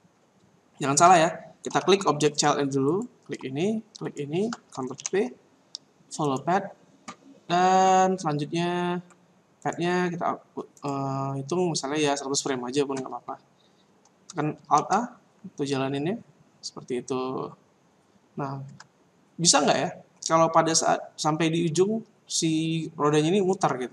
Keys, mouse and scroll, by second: 1.7 a, 2.8 right click, 4.0 shift+right click, 5.0 ctrl+p, 9.6 right click, 10.8 click, 12.6 click, 14.7 alt+a, 18.6 Escape.